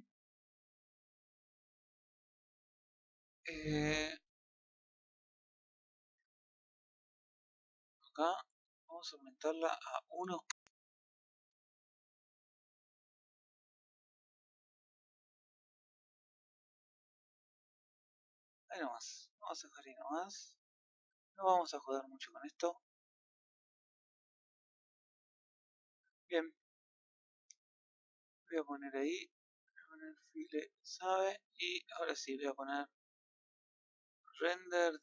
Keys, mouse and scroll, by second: 8.3-29.1 drag, 31.2-35.0 drag.